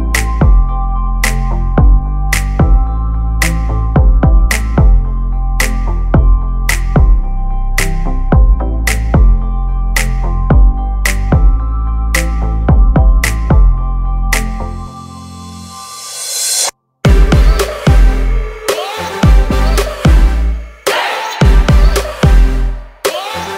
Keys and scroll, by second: 0.0-0.6 typing, 1.6 e, 8.4 space, 8.5 Escape, 13.2 r, 20.1 p, 20.7 space, 21.6 Delete, 22.1 p.